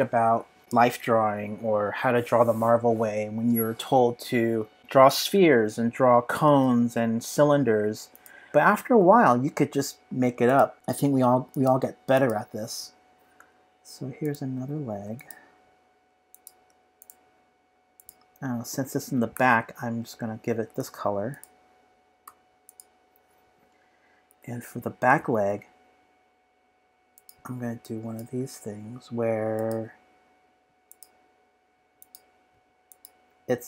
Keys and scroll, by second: 13.4 p, 19.3 shift+super+[, 22.2 v, 24.3 p.